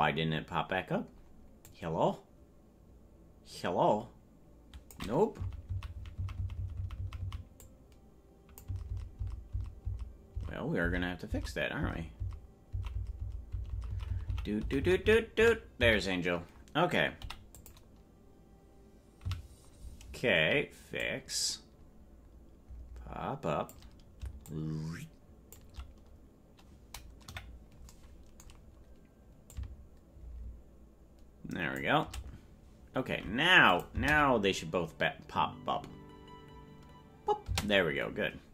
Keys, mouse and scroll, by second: 0.2 scroll up 1, 0.2 scroll down 5, 0.5-1.7 scroll up 1, 1.7-5.0 drag, 5.5 Right, 7.6 Right, 7.6-14.8 drag, 8.8 Left, 9.0 Left, 9.9 Left, 12.3 Left, 14.7 Left, 14.7 Right, 14.9 Right, 15.9 Left, 15.9 Right, 17.2 i, 19.4 Right, 21.0-23.7 drag, 24.4-25.6 shift+drag, 26.0-27.2 scroll up 7, 27.2 KP_Decimal, 29.5-31.2 drag, 33.7 click, 33.9 space, 37.5 space.